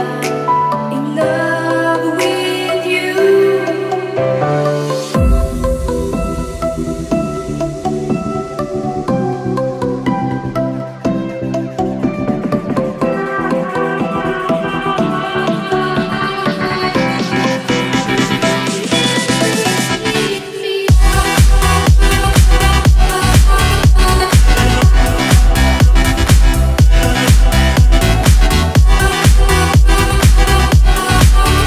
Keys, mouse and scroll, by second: 4.5 click, 5.7 right click, 19.0 click, 20.4 click, 21.5 click.